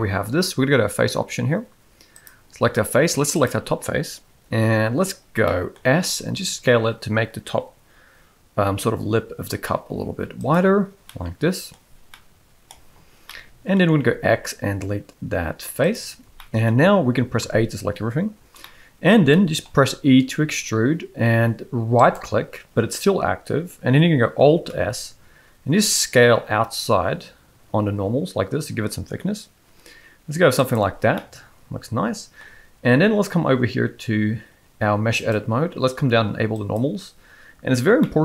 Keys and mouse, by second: 2.1 click, 5.4 middle click, 5.9 s, 11.1 middle click, 13.3 middle click, 15.0 x, 16.4 shift+middle click, 17.4 a, 18.6 middle click, 19.3 shift+middle click, 20.3 e, 24.8 alt+s, 31.1-32.4 middle drag, 35.2-37.0 drag, 38.0 middle click.